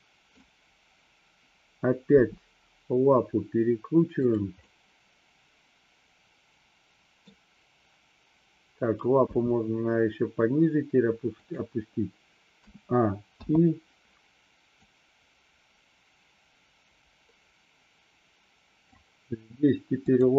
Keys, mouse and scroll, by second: 2.3 r, 4.3 click, 4.8-7.4 middle drag, 9.3 g, 11.5 click, 12.6 a, 13.5 i, 14.9-19.0 drag.